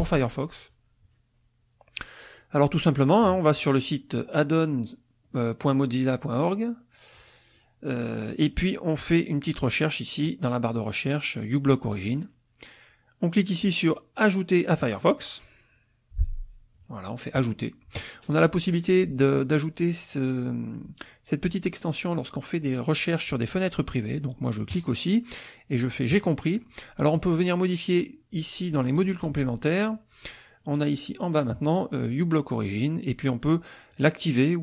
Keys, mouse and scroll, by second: 10.1 click, 14.8 click, 17.3 click, 24.7 click, 26.1 click, 27.2 click, 29.0 click, 30.5-33.9 scroll down 4, 33.9 click.